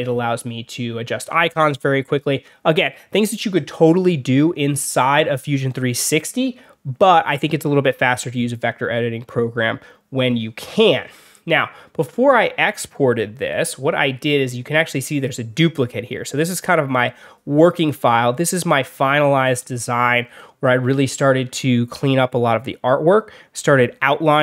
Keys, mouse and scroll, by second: 1.2 alt+scroll down 2, 11.1 alt+scroll down 2, 12.7 alt+scroll up 2, 13.6-14.1 alt+scroll down 4, 14.2 alt+scroll up 2, 14.7 alt+scroll down 2, 16.0 alt+scroll up 2, 16.2 alt+scroll down 2, 18.3 alt+scroll up 2, 18.9-19.3 alt+scroll up 4, 19.8 alt+scroll up 2.